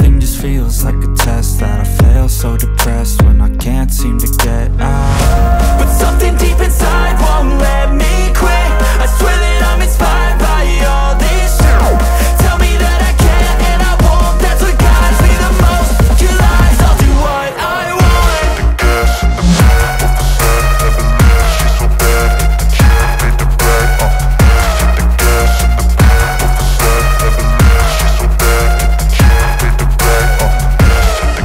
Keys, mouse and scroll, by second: 0.9 click, 2.5-2.9 alt+scroll up 1, 3.7-4.2 typing, 4.9-8.2 alt+drag, 8.2 ctrl+z, 9.5 click, 11.3-13.2 alt+drag, 14.1 alt+click, 15.1 alt+click, 15.9 alt+click, 16.9-17.2 alt+scroll down 1, 19.4-19.8 alt+scroll up 1, 21.9 alt+click, 23.6 alt+scroll down 1, 24.7-25.6 alt+scroll down 1, 25.6 click, 28.2 click, 28.7 alt+scroll up 1, 30.2-31.4 alt+drag.